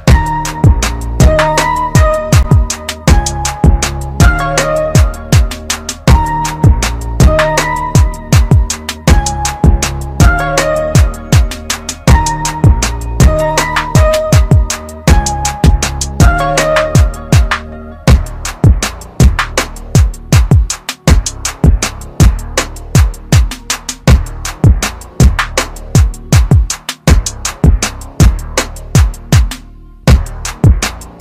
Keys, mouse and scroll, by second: 0.2 scroll down 1, 2.2 click, 3.5 Delete, 4.3 click, 5.4-5.9 scroll up 1, 8.2 click, 9.5 Delete, 10.2 click, 11.4-11.9 scroll up 1, 14.7 ctrl+KP_Subtract, 15.3 ctrl+KP_Subtract, 16.5 scroll down 1, 17.7-18.0 scroll up 1, 18.2 typing, 20.1 click, 21.7 click, 21.7 typing, 26.2 right click, 26.2 typing, 27.2 click, 28.7-31.1 typing.